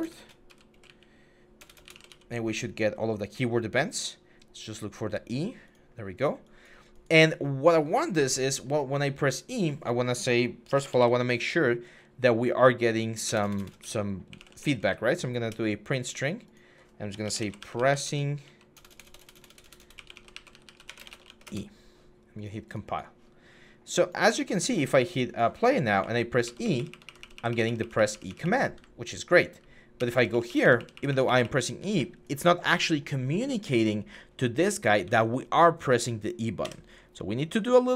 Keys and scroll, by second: 0.0-2.1 typing, 10.5-10.8 typing, 13.1-14.6 typing, 15.1 Return, 16.8-21.4 typing, 25.8-31.7 typing, 34.1-35.9 typing, 36.4 Escape.